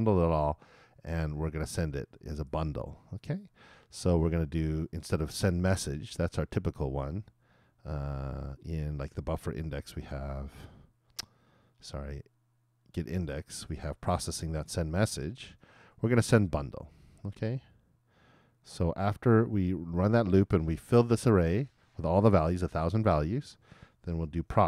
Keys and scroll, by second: 24.2 shift+`.